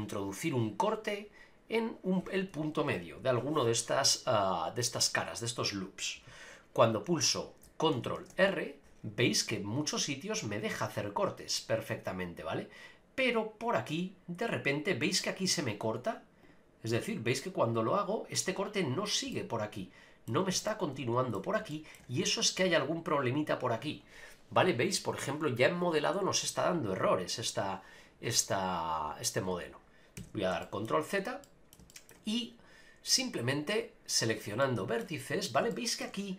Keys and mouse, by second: 8.2 ctrl+r, 19.4 middle click, 20.8 middle click, 21.8 shift+middle click, 30.2 ctrl+z, 30.6 shift+middle click, 31.4 middle click, 31.9 shift+middle click, 33.2 click, 34.6 shift+middle click, 35.7 shift+middle click.